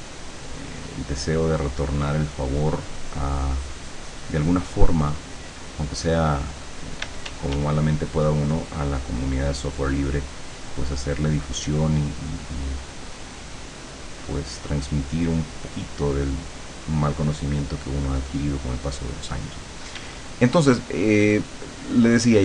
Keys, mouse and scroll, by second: 7.1 d, 7.9-19.1 drag, 20.1 d, 20.7-22.4 drag.